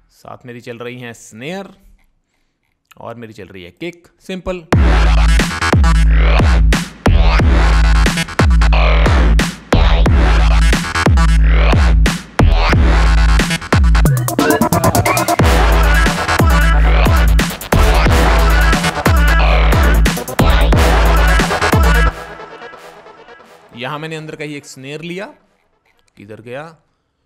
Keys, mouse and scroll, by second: 3.5 click, 12.2 click, 25.6 typing.